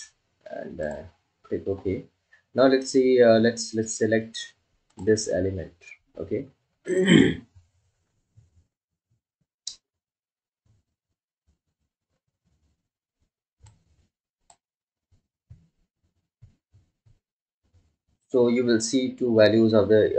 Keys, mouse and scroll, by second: 16.1-17.1 drag.